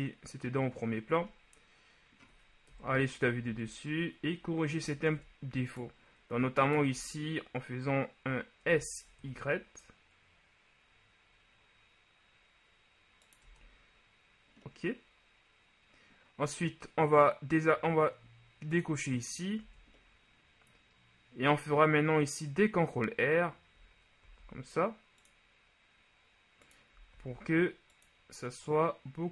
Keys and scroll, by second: 2.9 KP_7, 3.6 Tab, 5.2 ctrl+Tab, 8.8 s, 9.3 y, 13.6 Tab, 19.8 Tab, 24.4 ctrl+r, 27.3 ctrl+r.